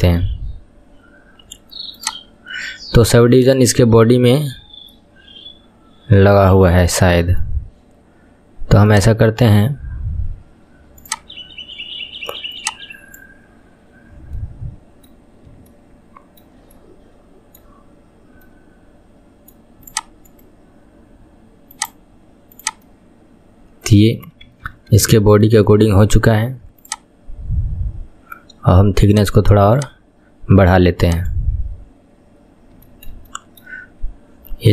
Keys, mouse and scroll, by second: 0.6-2.0 scroll up 1, 2.0-3.9 drag, 3.9-4.9 scroll down 1, 4.9-8.0 middle drag, 8.9 click, 9.4-10.2 scroll down 3, 10.2-10.9 scroll down 3, 11.1-13.2 drag, 14.4-15.3 middle drag, 15.3-15.7 scroll up 3, 15.7-17.8 shift+middle drag, 17.8-18.5 scroll up 2, 18.5-19.9 middle drag, 19.9 click, 20.3-22.6 right drag, 22.6 click, 22.9-24.5 middle drag, 24.5 KP_1, 24.8-25.1 scroll down 6, 25.2-26.9 shift+middle drag, 26.9 click, 27.3-27.9 scroll down 3, 27.9-29.1 scroll down 4, 29.1-32.6 drag, 32.6 scroll down 2, 32.9-33.9 shift+middle drag, 33.9-34.7 scroll up 5.